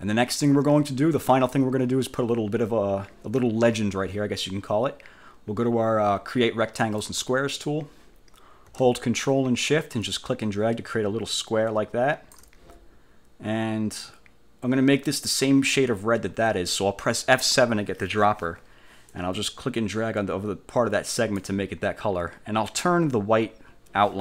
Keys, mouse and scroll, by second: 0.1 scroll down 2, 0.4 scroll up 2, 0.7 scroll down 2, 7.1 click, 10.2-12.6 ctrl+shift+drag, 17.4 F7, 19.2-21.6 drag.